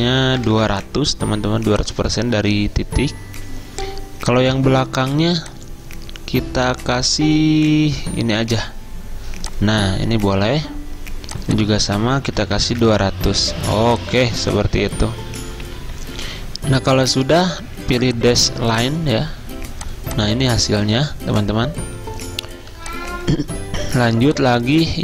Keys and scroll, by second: 0.0-1.1 typing, 12.3-13.3 typing, 24.0 z.